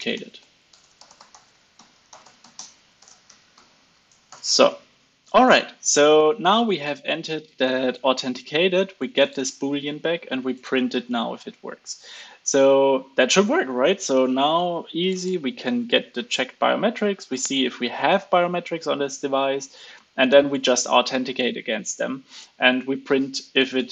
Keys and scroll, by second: 3.8 super+s, 4.2 alt+super+l, 4.5 super+s.